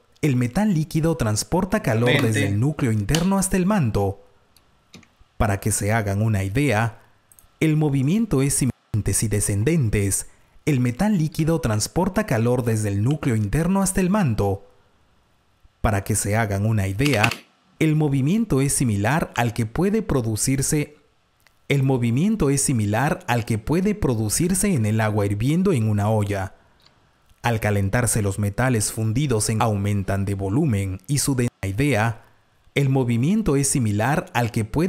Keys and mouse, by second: 0.9 click, 6.4 alt+shift+Tab, 6.4 F1, 6.4 Delete, 6.4 click, 7.4 click, 9.5 F2, 11.3 super+s, 13.1 super+r, 14.1 click, 14.4 super+t, 16.7 click, 17.1 space, 19.2 r, 21.7 click, 24.7 F1, 28.7 End, 28.7 Delete, 28.7 r, 31.1 click.